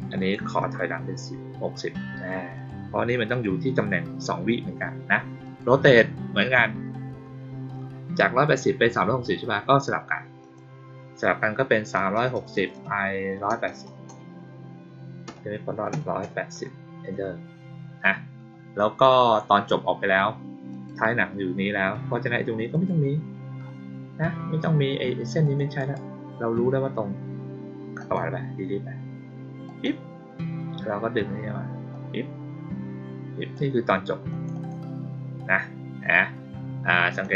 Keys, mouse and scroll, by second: 0.1 click, 0.8 middle click, 2.5 click, 3.2 click, 5.4 click, 10.3 click, 20.6 click, 22.6 click, 25.3 click, 25.7 right click, 27.9 click, 29.6 click, 31.8-33.5 drag, 34.2 click, 34.5 click, 37.0 click.